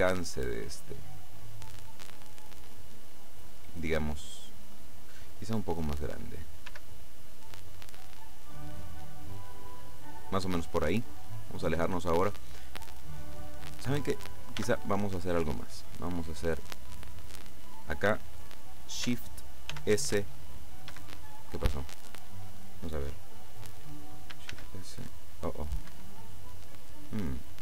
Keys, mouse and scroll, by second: 2.6 click, 6.8 s, 10.1 click, 11.5-12.0 scroll down 1, 14.7 b, 15.7-17.5 drag, 19.8 shift+s, 21.0 Escape, 24.6 shift+s, 26.0 Escape.